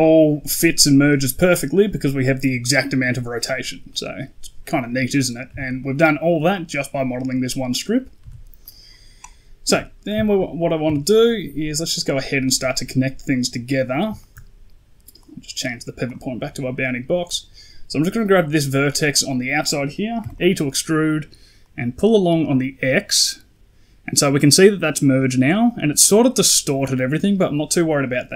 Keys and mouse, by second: 3.8 middle drag, 5.4 Tab, 5.7 middle click, 8.1 Tab, 8.5 middle drag, 9.6 KP_1, 10.1 shift+middle drag, 10.7 Tab, 12.0 click, 12.3 shift+middle click, 13.6 click, 14.1 shift+middle click, 15.1-16.0 drag, 20.1 e, 21.5-24.3 drag.